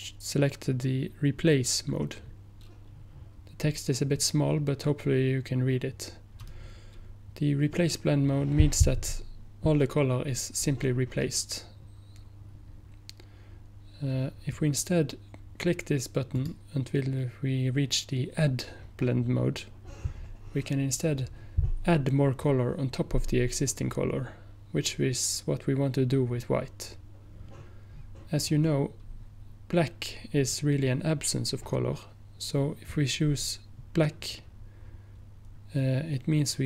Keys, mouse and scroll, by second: 16.4 click.